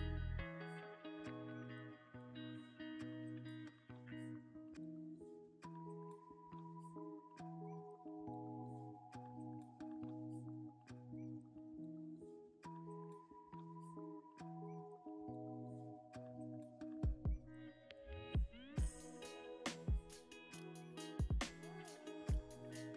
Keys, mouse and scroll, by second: 5.9 scroll down 1, 6.2 middle click, 6.7 Tab, 7.3 ctrl+r, 10.7 ctrl+r, 13.0 scroll up 1, 13.9 middle click, 14.7 ctrl+r, 18.2 ctrl+r.